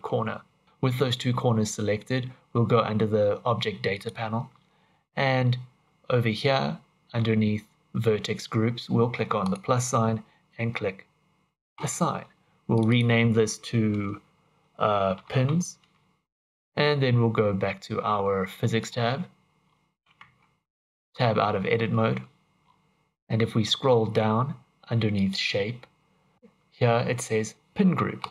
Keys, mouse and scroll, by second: 3.9 click, 9.4 click, 11.7 click, 12.7 click, 12.8 click, 18.8 click, 19.6-20.9 scroll down 4, 20.9 Tab, 22.6-23.1 scroll down 6, 22.8 click, 22.8-23.3 scroll up 11, 23.3-24.6 scroll down 10, 25.1 click, 28.2 click.